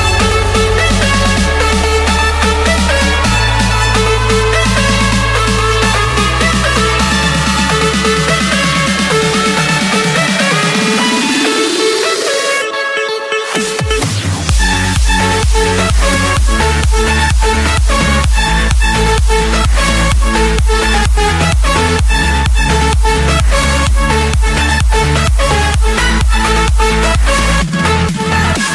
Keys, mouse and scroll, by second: 0.1-0.9 scroll, 1.2 click, 2.7 click, 2.8-3.6 scroll, 4.8 click, 5.6 click, 6.0 Escape, 7.8 click, 8.3 Escape, 8.9-9.9 drag, 11.0-12.0 drag, 12.7-13.8 typing, 13.9 Return, 15.5-17.1 middle drag, 17.3-18.0 scroll, 18.0 Escape, 18.5-19.5 right drag, 19.9-20.9 drag, 21.4 click, 22.3 Escape, 22.9 click, 24.0 click, 24.3-25.0 scroll, 25.2 click, 25.7 scroll, 26.5 scroll, 27.7 click, 28.4 click.